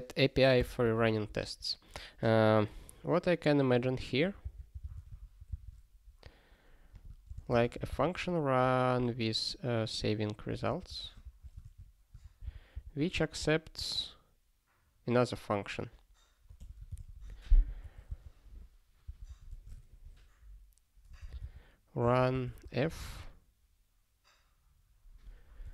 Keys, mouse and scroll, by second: 0.6 ctrl+g, 1.2 super+b, 2.9-3.3 scroll down 1, 3.6 scroll up 1, 4.0 click, 4.4 super+b, 6.9 click, 7.3 ctrl+space, 7.3 ctrl+a, 7.6 alt+;, 8.0 ctrl+s, 9.9 click, 10.7 ctrl+f, 10.9 ctrl+f, 11.2 (, 11.6 alt+shift+s, 12.2 ctrl+e, 12.5 ctrl+b, 16.6 f, 17.0 ctrl+s, 17.8 ctrl+f, 18.1 Return, 19.1 Return, 19.2 ctrl+p, 19.5 Tab, 19.7 ", 21.3 u, 22.0 space, 22.3 shift+f, 22.6 space, 25.5-25.7 typing.